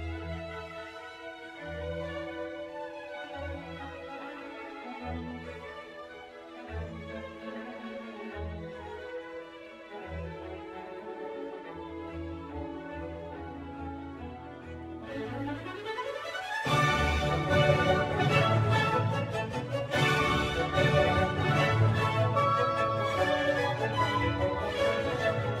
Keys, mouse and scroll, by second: 5.3-6.3 scroll down 2, 6.3-9.2 middle drag, 11.2 click, 12.0 click, 17.3 click, 18.1-21.3 middle drag, 21.3 click, 24.7-25.6 drag.